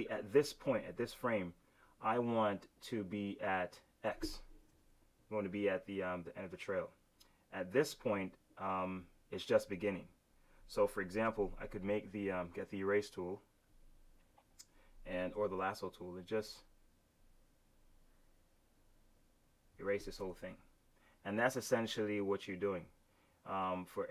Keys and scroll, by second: 4.6 super+z.